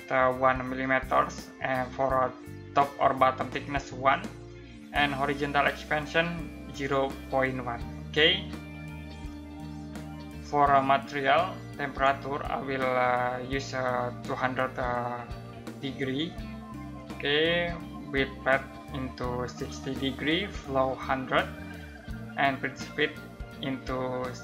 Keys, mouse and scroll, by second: 8.9-10.3 drag.